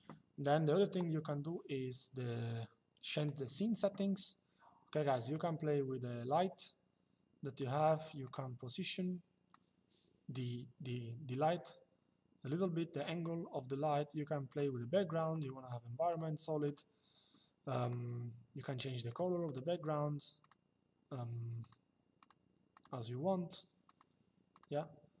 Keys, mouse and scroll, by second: 2.9 click, 5.0 click, 7.9 click, 9.2 click, 14.2 click, 17.5 click, 18.7 click, 21.3 click, 23.5 click.